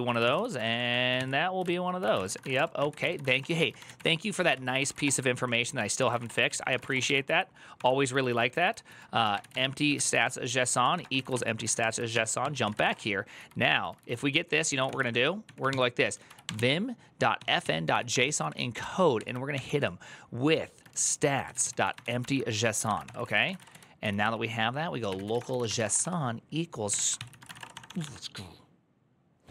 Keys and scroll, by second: 2.8-28.3 typing, 5.1 ctrl+n, 5.5 ctrl+s, 7.5 ctrl+d, 12.2 ctrl+t, 17.9 ctrl+c, 18.1 ctrl+c, 26.7 Tab, 26.9 ctrl+c.